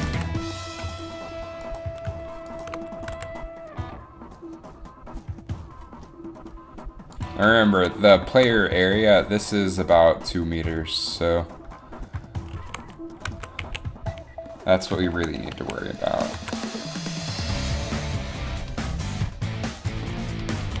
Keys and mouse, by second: 0.1 r, 3.1 r, 3.2 r, 12.7 a, 13.4 z, 13.7 a, 15.7 a, 16.2 click, 16.6 z, 17.4 r.